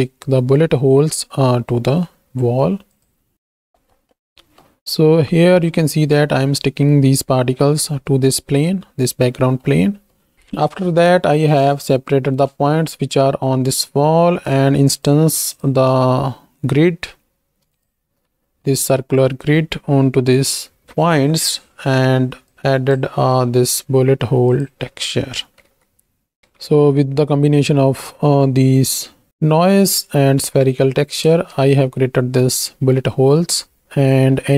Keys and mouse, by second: 2.9-3.3 drag, 3.8 middle click, 4.6 middle click, 9.6 middle click, 10.3 ctrl+shift+x, 10.5 ctrl+shift+click, 14.4 click, 18.7 middle click, 22.5 click, 23.2 x, 24.8 click, 25.6 z, 26.4 ctrl+space, 29.0 click, 29.4 middle click, 31.3 ctrl+space, 32.8 shift+click.